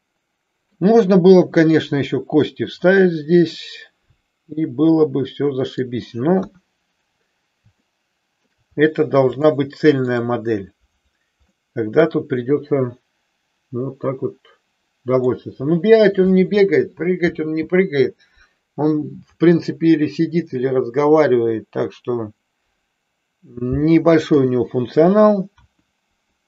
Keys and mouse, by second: 3.6-5.9 middle drag, 6.4 KP_1, 7.8-8.5 middle drag, 9.4-10.2 shift+middle drag, 11.5-15.4 middle drag, 24.2 KP_3, 25.6 KP_1.